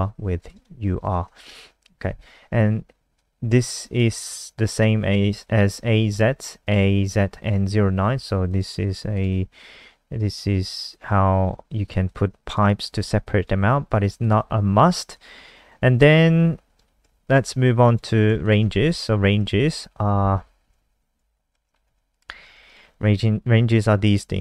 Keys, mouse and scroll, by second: 0.4 click, 1.2 BackSpace, 3.2 click, 9.5-12.0 scroll down 3, 12.0 click, 17.0 ctrl+c, 17.2 click, 18.4 shift+click, 19.0 shift+Home, 22.4 s, 22.7 click.